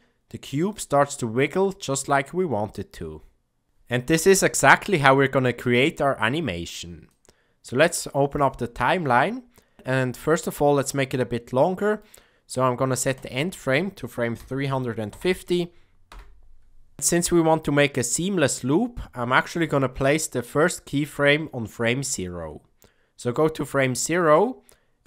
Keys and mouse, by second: 7.0-8.4 drag, 10.3-11.9 middle drag, 13.2-16.9 drag, 19.9 click, 23.7 middle click.